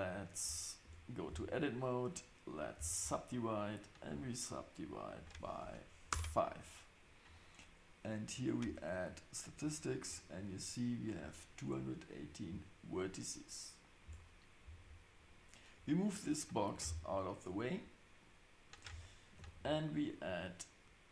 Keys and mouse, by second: 0.8 Tab, 1.7-3.3 right drag, 4.0 click, 5.0-6.7 drag, 8.3-10.0 drag, 14.0 Tab, 16.8 g, 19.4 shift+a.